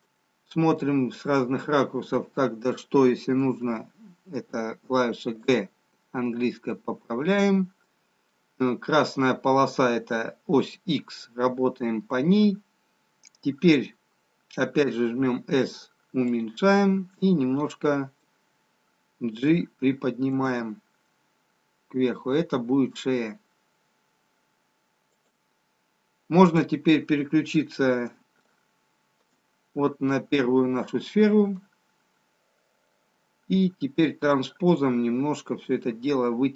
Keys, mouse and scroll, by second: 3.0-4.8 scroll down 3, 4.8 g, 6.1-7.3 scroll up 1, 7.3 middle click, 7.3-8.6 scroll up 1, 14.8 s, 19.7 middle click, 21.1 g, 26.3 click, 28.3 shift+middle click, 29.6-31.8 scroll up 2, 31.8 middle click, 31.8-32.6 scroll up 1, 33.0 scroll down 1.